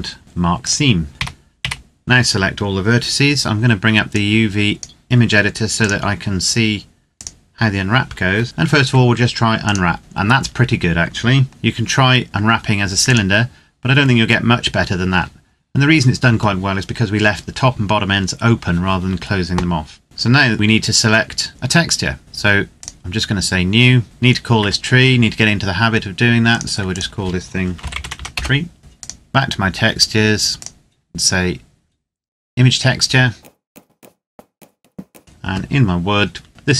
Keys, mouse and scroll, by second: 0.4 click, 1.1 a, 1.4 a, 3.8 click, 8.4 u, 9.4 click, 11.4 g, 12.8 click, 13.8-15.8 scroll up 1, 22.2 click, 24.0 Tab, 26.3 click, 27.5-27.9 typing, 28.1 Return, 28.8 click, 33.4 click.